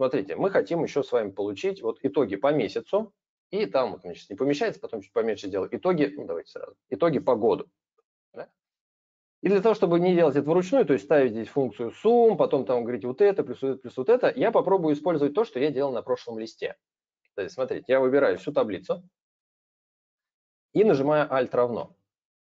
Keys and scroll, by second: 18.0 ctrl+a, 22.0 alt+=.